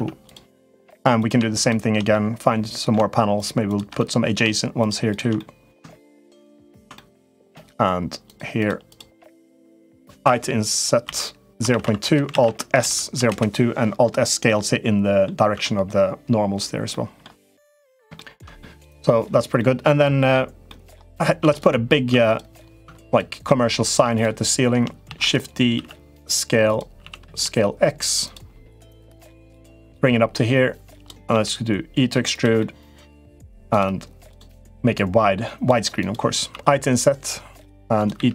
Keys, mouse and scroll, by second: 0.0 click, 0.4 middle click, 1.0 click, 1.4 click, 1.9 middle click, 3.4 shift+click, 3.7 middle click, 4.5 shift+click, 4.8 shift+click, 5.1 middle click, 5.8 shift+click, 6.3 shift+click, 6.7 middle click, 8.1 shift+click, 8.3 shift+click, 8.6 shift+click, 9.0 shift+click, 9.4 shift+click, 10.8 i, 12.1 alt+s, 14.2 middle click, 15.3 Tab, 16.6 middle click, 17.9 shift+middle click, 18.4 middle click, 19.3 middle click, 20.4 middle click, 20.9 click, 21.2 Tab, 21.3 click, 21.9 Tab, 22.0 click, 22.6 Tab, 22.8 click, 23.2 middle click, 24.8 shift+d, 25.5 s, 26.8 s, 28.5 middle click, 29.7-30.8 drag, 31.1 e, 32.3 middle click, 34.8 click, 35.7 click, 36.3 i, 37.9 e.